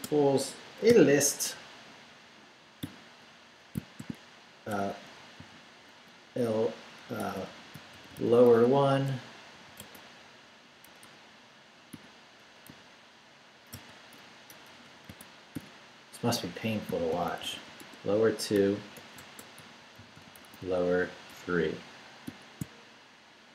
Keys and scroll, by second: 0.0-0.9 typing, 2.8-5.4 typing, 7.2-9.8 typing, 10.8 BackSpace, 11.9 !, 13.7-15.5 typing, 16.6-22.2 typing.